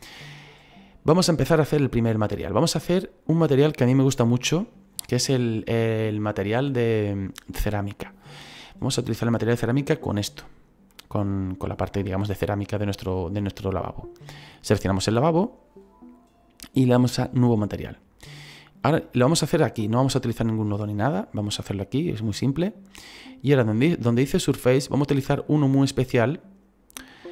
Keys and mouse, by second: 1.4 shift+middle click, 2.8 middle click, 4.1 shift+middle click, 10.9 middle click, 14.7 right click, 17.4 click, 24.7 click, 26.0 click.